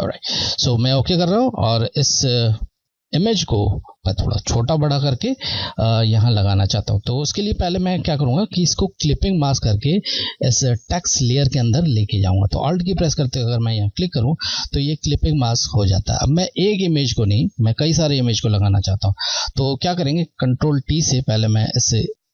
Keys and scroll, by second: 14.1 Left.